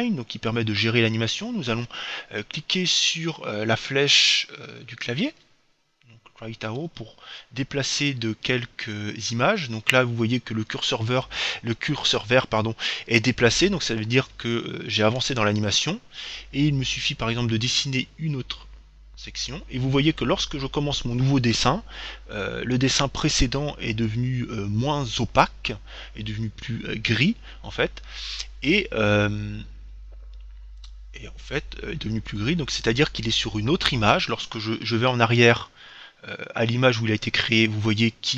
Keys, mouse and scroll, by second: 5.5 Right, 8.8 Right, 35.2 Left.